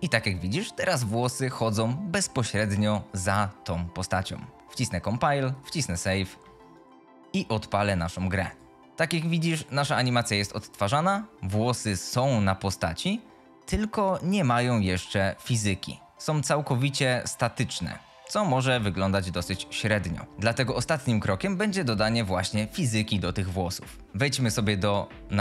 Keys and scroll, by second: 0.6 F22, 8.8 w, 10.0 a, 20.1-20.9 typing.